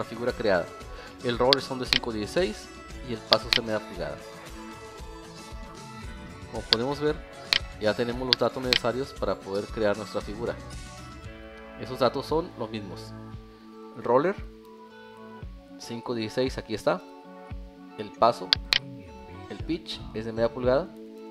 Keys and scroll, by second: 5.8 alt+e, 9.7 alt+2.